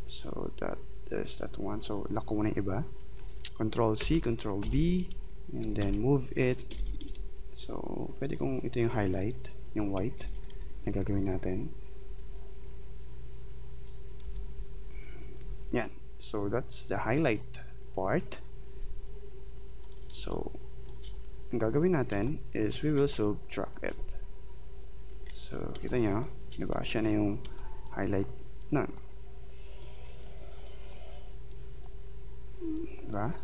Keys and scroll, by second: 4.0 ctrl+c, 4.6 ctrl+b, 5.8 shift+Right, 6.7 Left, 10.2 Left, 12.0 Right, 14.2 Left, 15.4 Right, 20.2 space.